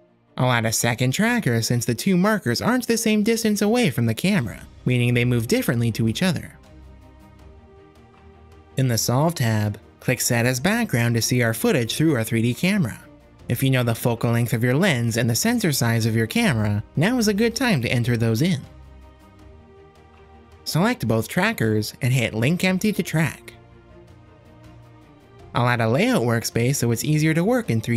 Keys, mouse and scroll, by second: 1.4 click, 3.5 ctrl+click, 4.6 e, 6.2 click, 8.2 ctrl+l, 11.9 click, 14.7 click, 15.5 click, 17.0 click, 17.9 click, 19.3-20.8 drag, 21.5 click, 22.5 a, 24.1 click, 25.5 click, 26.8-27.9 drag.